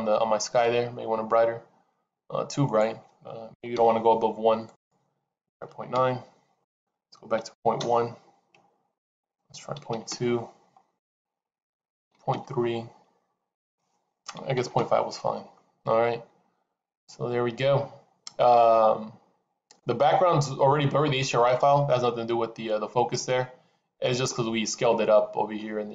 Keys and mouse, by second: 13.6-15.6 drag.